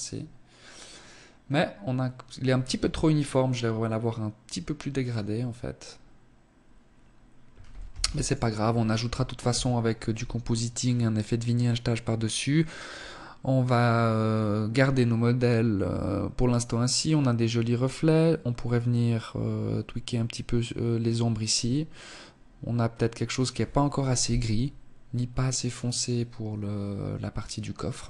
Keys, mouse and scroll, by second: 1.6 Escape, 6.8 ctrl+s.